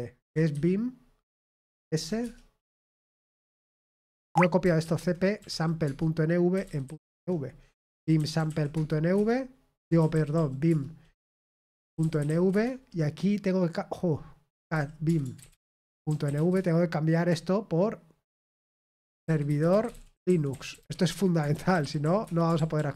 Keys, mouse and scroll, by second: 1.6-2.5 typing, 5.4-9.1 typing, 16.3 typing, 16.5 Return, 18.9-22.5 typing, 22.5 ctrl+p, 22.7 ctrl+p.